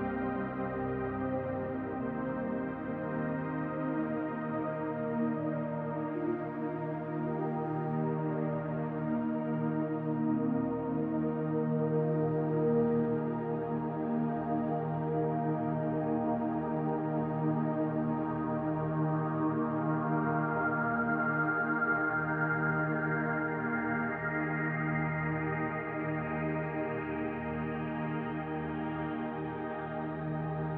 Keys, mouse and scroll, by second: 1.4 middle click, 4.2-4.5 scroll down 2, 4.5 middle click, 5.3-6.4 scroll up 2, 6.4-7.2 scroll down 1, 7.2 scroll down 1, 7.4 click, 12.3 middle click, 13.2 middle click, 14.5 click, 16.4 click, 17.3 middle click, 19.4 middle click, 24.5 click, 30.2 click.